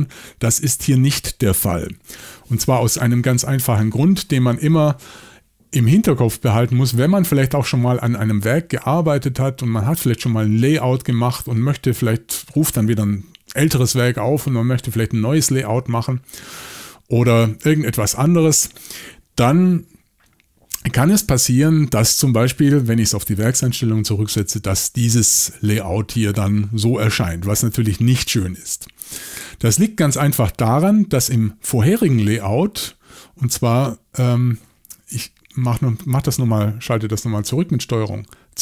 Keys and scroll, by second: 2.0 typing, 35.5 super+z.